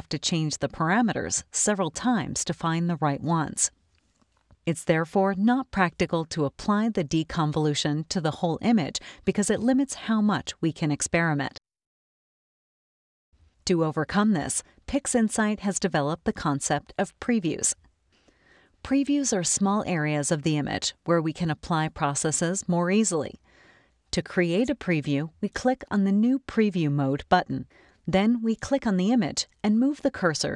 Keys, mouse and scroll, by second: 11.5 click, 12.8 scroll up 2, 12.9 click, 25.6 click, 28.8-30.2 drag.